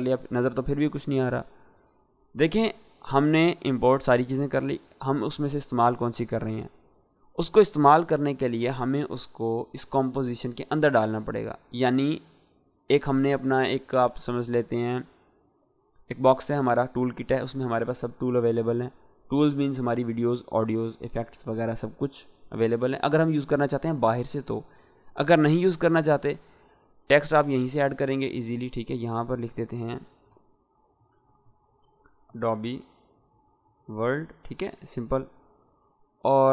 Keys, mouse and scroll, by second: 26.6 click, 30.5-31.7 typing, 32.9-33.9 typing, 34.7 click.